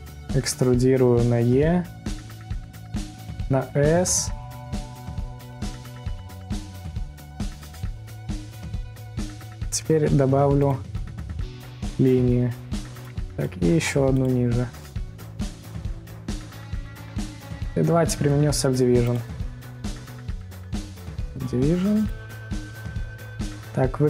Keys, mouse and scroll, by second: 2.3 e, 8.5 middle click, 9.2 click, 11.0 ctrl+r, 13.6 click, 17.2 middle click, 17.6 Tab, 18.0-18.5 scroll down 3, 18.5-19.3 scroll up 2, 19.3-24.0 drag.